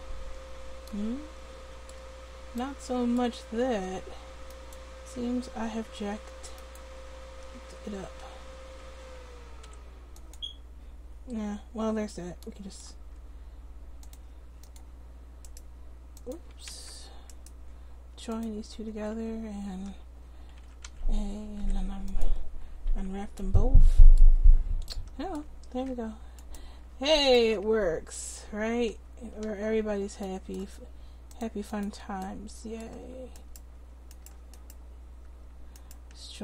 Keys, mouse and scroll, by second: 3.7 Tab, 4.6-8.8 drag, 5.2 Tab, 5.9 Tab, 7.5 Tab, 8.0 a, 8.8 a, 9.7 u, 14.8 click, 15.7 click, 15.9-18.3 right drag, 16.8 ctrl+z, 18.9 Tab, 20.6 a, 20.9 a, 21.6 u, 26.4 click, 26.8 Tab, 26.8-28.9 right drag, 27.5 Tab, 28.5 a, 28.9 a, 29.5 a, 29.9 a, 31.9 a.